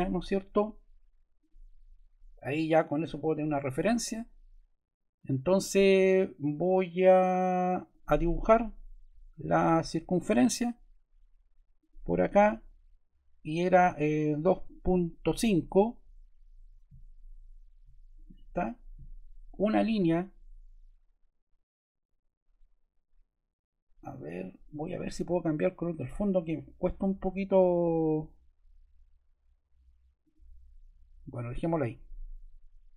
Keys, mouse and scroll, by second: 0.3 ↺, 1.3 click, 7.8-8.9 drag, 11.7-12.9 drag, 14.1-16.6 typing, 30.1 click.